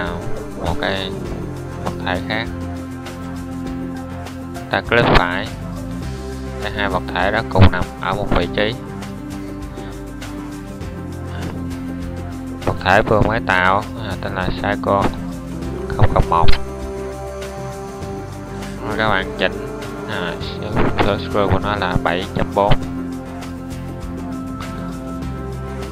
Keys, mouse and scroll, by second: 2.4 shift+d, 8.9 middle click, 20.3-22.0 middle drag, 23.8-24.5 middle drag.